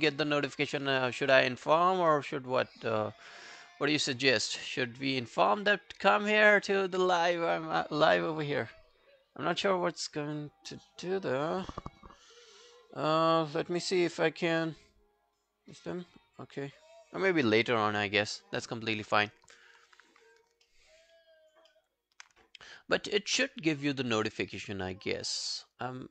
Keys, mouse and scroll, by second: 20.7 alt+middle click, 21.1 alt+scroll down 1, 21.3 alt+click, 21.7 alt+middle click.